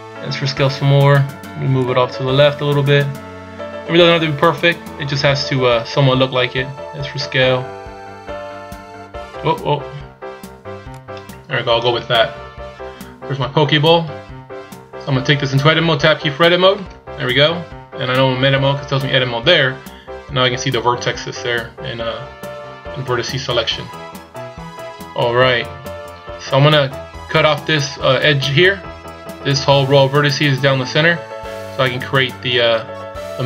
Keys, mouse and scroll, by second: 1.9 click, 6.6 s, 16.8 Tab, 24.9-25.9 scroll up 1.